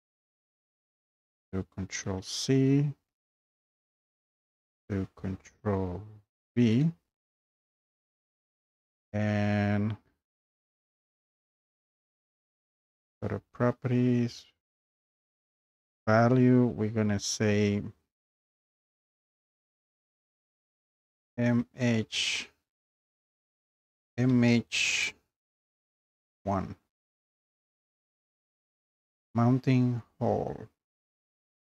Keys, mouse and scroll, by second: 1.9 scroll up 5, 2.0 ctrl+c, 2.7-3.4 scroll down 4, 3.8 scroll up 2, 4.5-4.9 scroll up 2, 6.7 ctrl+v, 8.2 scroll, 8.5 click, 12.0 click, 12.2 click, 15.9 click, 20.9-22.3 typing, 23.5-26.3 typing.